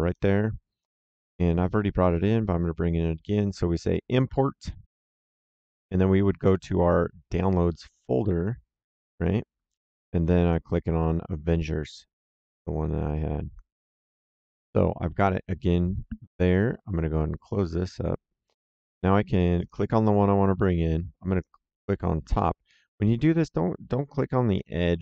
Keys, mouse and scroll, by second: 4.0 click, 8.8 click, 10.3 click, 12.4 click, 17.4 click, 19.5 click, 21.3 click.